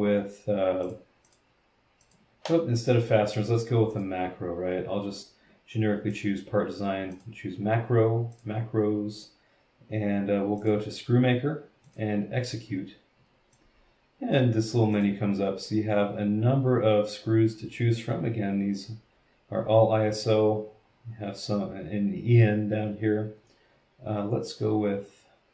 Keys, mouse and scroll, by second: 0.8 click, 1.3 click, 2.0 click, 3.9 click, 6.1 click, 7.1 click, 8.3 click, 10.6 click, 11.8 click, 13.5-14.5 drag, 14.9 click, 20.6 scroll down 1, 20.9-21.2 scroll up 1.